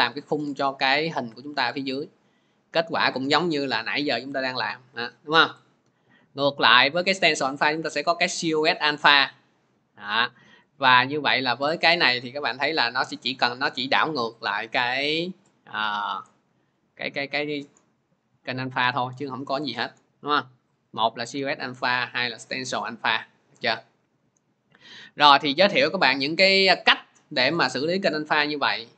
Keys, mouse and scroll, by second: 0.6 click, 5.4 click, 7.0 click, 13.1 click, 13.9-18.2 drag, 19.6-23.4 drag.